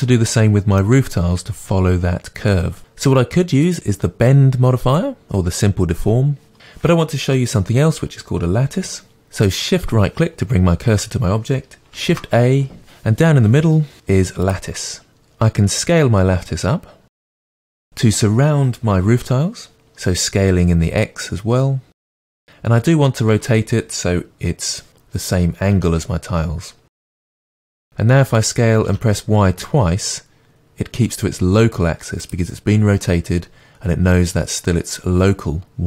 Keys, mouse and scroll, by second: 9.1-15.1 shift+right drag, 15.1-15.6 scroll up 2, 15.6 s, 22.4-27.5 middle drag, 24.9 KP_3, 25.7 r, 27.5 s.